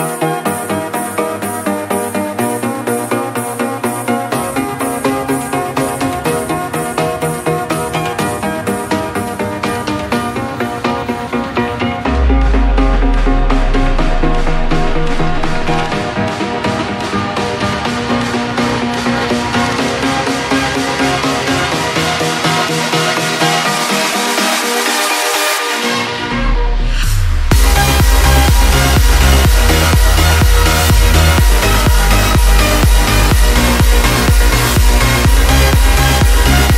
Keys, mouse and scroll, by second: 6.7-10.3 drag, 11.3 click, 29.8 g, 31.6 right click, 32.6 click.